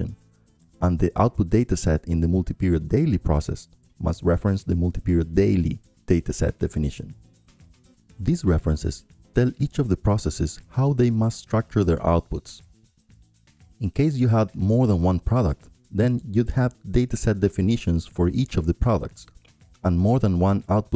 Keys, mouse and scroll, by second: 1.7-5.3 drag, 6.0-7.1 drag, 7.2-9.1 drag, 9.6-10.7 drag, 11.3-13.4 drag, 13.9-20.6 drag, 16.3 ctrl+scroll down 1, 16.7 ctrl+Down, 17.0 ctrl+Down, 17.3 ctrl+Down, 17.5 ctrl+Down, 17.9 ctrl+Down, 20.6-20.9 right drag.